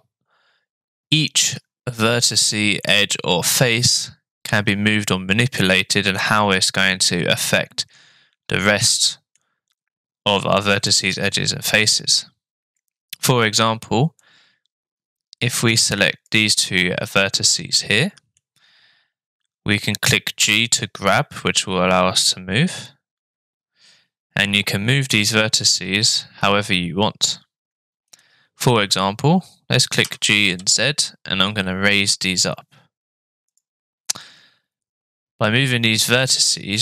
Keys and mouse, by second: 7.6-9.3 middle drag, 10.9-12.8 drag, 14.2-16.3 drag, 17.2-18.4 middle drag, 20.4 g, 30.0 g, 34.2-36.8 middle drag.